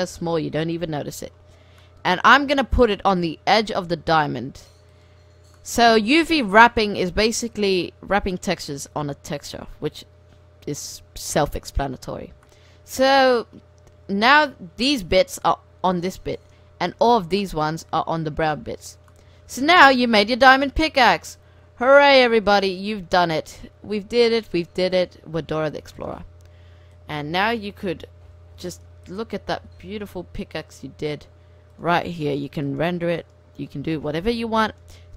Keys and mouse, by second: 0.1 middle drag, 0.1 g, 0.9 middle click, 3.5 s, 4.9-5.6 drag, 6.0 s, 8.8 g, 12.3 Tab, 14.3 Tab, 18.8 Tab, 21.1 r, 22.7 r, 24.9 r, 26.9-28.9 drag, 27.4 KP_0, 29.0-30.1 drag, 29.5 shift+f, 32.4-35.1 drag.